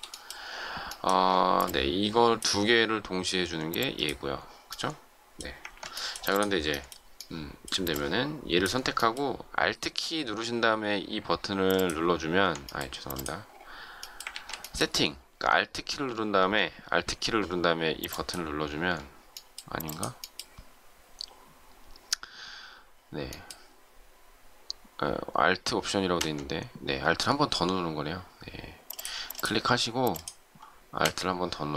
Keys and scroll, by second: 5.6 ctrl+z, 14.3 ctrl+z.